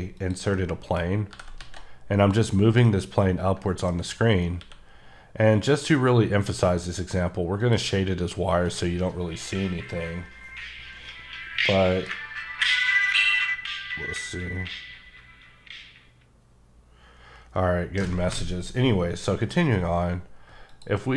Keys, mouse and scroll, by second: 0.2 click, 0.5 middle click, 1.3 g, 1.6 z, 2.3 click, 2.8 middle click, 4.2 scroll up 2, 4.6 q, 7.6 click, 20.7 click.